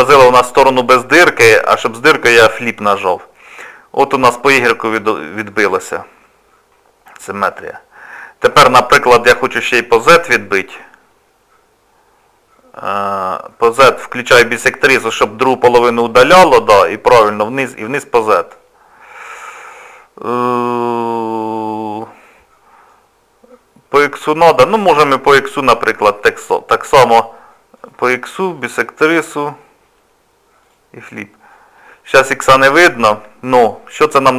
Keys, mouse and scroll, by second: 0.4 click, 0.8 click, 10.5 click, 14.9 click, 18.2 middle click, 25.5 click, 27.8 click, 30.7 click.